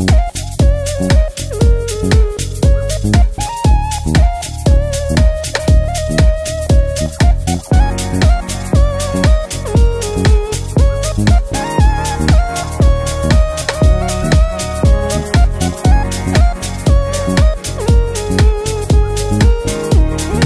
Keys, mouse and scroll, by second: 11.0-12.2 drag.